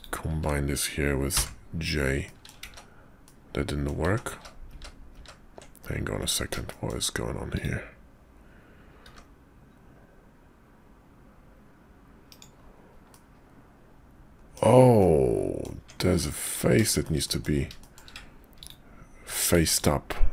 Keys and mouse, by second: 1.3 j, 2.2 click, 2.6 ctrl+z, 3.2 click, 4.3 ctrl+z, 4.6 ctrl+z, 5.1 ctrl+z, 5.8 click, 6.2 Tab, 6.7 shift+click, 7.5 click, 9.1 g, 13.1-14.6 middle drag, 15.0 middle click, 15.8 Tab, 16.4 click, 16.8 shift+middle click, 17.2 middle click, 17.8 shift+click, 18.6 ctrl+click, 19.5 ctrl+z, 19.7 ctrl+click.